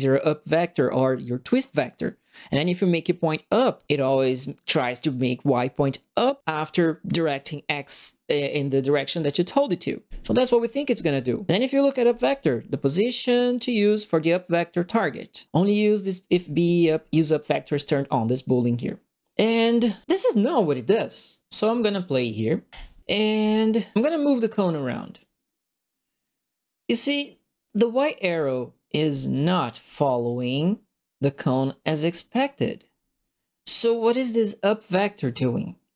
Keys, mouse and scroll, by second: 22.6 click, 22.9-23.9 typing, 23.0 right click, 25.1-27.9 drag, 28.1-29.3 right drag, 28.2 w, 30.2-33.1 right drag, 33.1 click, 33.4 right click, 33.5-35.9 drag.